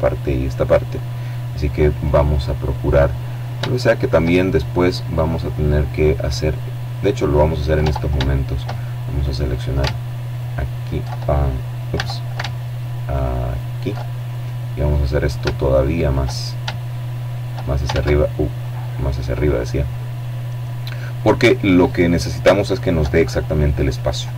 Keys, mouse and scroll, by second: 1.9-2.5 scroll down 1, 2.5 shift+middle click, 3.4 right click, 4.9 right click, 6.4 Tab, 7.0 shift+middle click, 8.2 alt+right click, 9.0 alt+shift+right click, 10.6 a, 12.1 alt+shift+right click, 13.0-14.5 alt+shift+drag, 15.6-16.7 drag, 16.6 ctrl+z, 17.3-18.3 drag, 19.7-20.8 middle drag, 20.8-21.4 scroll down 3, 21.9-23.4 shift+middle drag, 23.7 Tab.